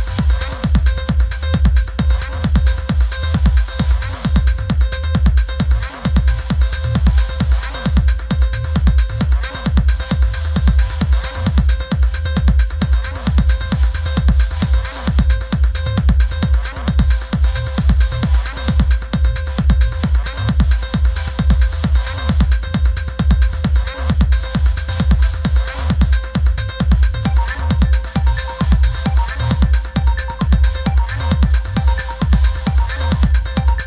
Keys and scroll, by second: 1.3 super+=, 15.8 i, 18.8 super+[.